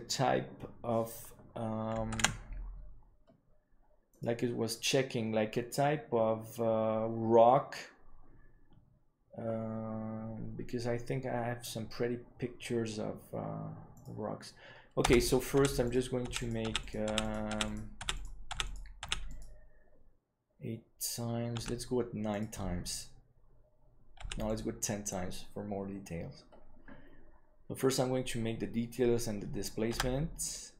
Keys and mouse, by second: 2.3 ctrl+s, 15.0 Tab, 15.5-19.0 typing, 22.6 w, 24.1 w.